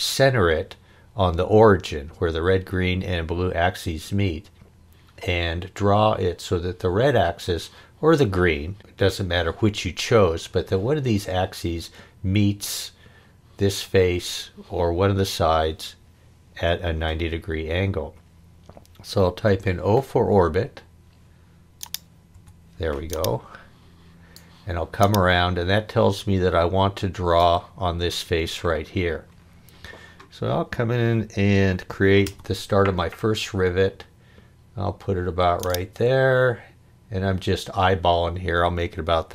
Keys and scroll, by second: 19.4 o, 22.3 o, 32.2 c.